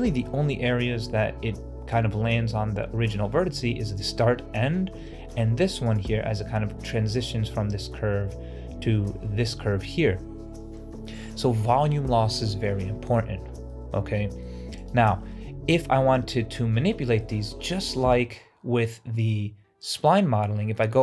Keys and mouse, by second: 13.6-14.3 middle drag, 15.2-17.1 middle drag, 17.9 Tab.